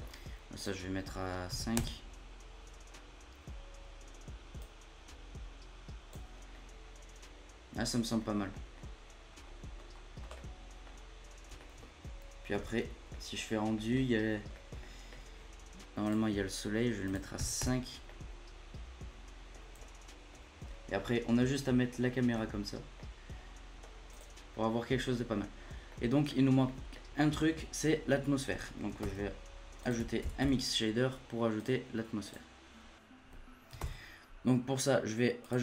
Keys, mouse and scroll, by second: 0.0-0.5 scroll up 2, 0.5-2.9 drag, 2.9-4.1 scroll up 3, 4.1-4.6 scroll up 1, 4.6-6.3 drag, 6.3 scroll down 1, 6.5-8.2 middle drag, 8.2 scroll down 1, 8.2 scroll up 2, 8.5 middle click, 8.7-9.3 scroll down 1, 9.3-10.3 scroll up 3, 10.3-10.9 middle drag, 10.9 scroll down 2, 11.6 shift+middle click, 11.8 scroll down 1, 12.5 z, 13.1 middle click, 13.3 scroll up 1, 13.7-16.0 middle drag, 16.0 click, 17.0-18.0 drag, 18.0-19.7 middle drag, 19.7-20.4 scroll up 1, 20.4 scroll down 1, 20.6-21.3 middle drag, 21.3 scroll up 1, 21.5 middle click, 22.4 scroll up 1, 22.7 scroll down 1, 22.9-24.1 middle drag, 24.1 click, 25.2-25.7 scroll down 17, 25.7 scroll up 1, 25.9-29.0 middle drag, 29.0 shift+a, 33.7 shift+a.